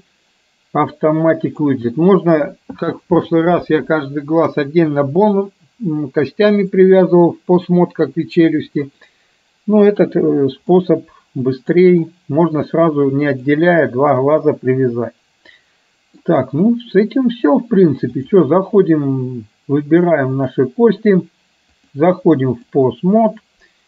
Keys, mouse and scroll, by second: 10.8-11.9 middle drag, 13.4 click, 14.5-16.3 middle drag, 18.1-19.3 drag, 21.8-22.9 drag.